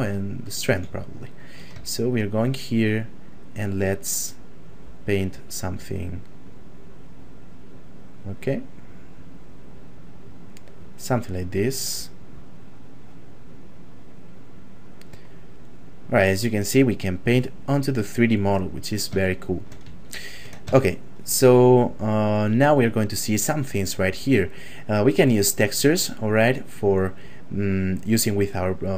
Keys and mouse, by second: 0.4 shift+middle click, 1.0 ctrl+middle click, 1.9 shift+middle click, 3.4 click, 19.3 shift+middle click, 20.0 ctrl+middle click, 20.8 shift+middle click, 22.7 click, 26.4 click.